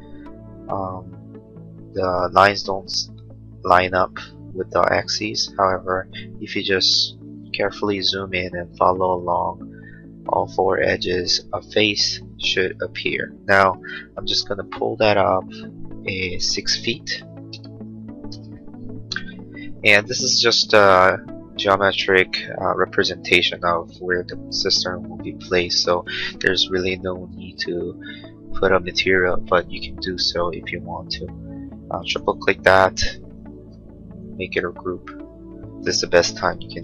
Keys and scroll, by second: 13.8 p, 17.1 6, 17.5 ', 18.4 Return, 19.8 space, 36.6 m.